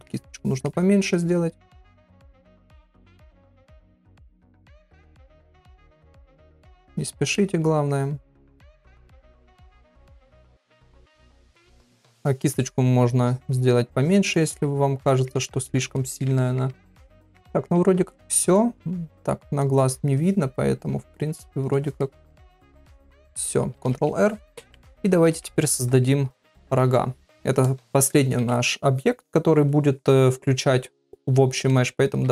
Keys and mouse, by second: 0.3 shift+middle click, 1.2 click, 1.6 click, 1.9 middle click, 2.4 shift+middle click, 3.1 click, 3.5 click, 3.9 middle click, 4.4 ctrl+middle click, 5.3 middle click, 5.9 click, 6.2 click, 6.6 middle click, 7.3 middle click, 8.4 click, 8.8 middle click, 9.5 middle click, 10.1 middle click, 10.9 click, 11.3 click, 11.9 middle click, 13.2 click, 14.0 click, 14.3 middle click, 15.0 middle click, 15.5 ctrl+middle click, 16.0 middle click, 16.4 ctrl+middle click, 16.9 shift+middle click, 17.1 shift+middle click, 17.6-20.0 middle drag, 21.3 click, 22.0 middle click, 22.7 click, 24.1 ctrl+r, 25.2 ctrl+Tab.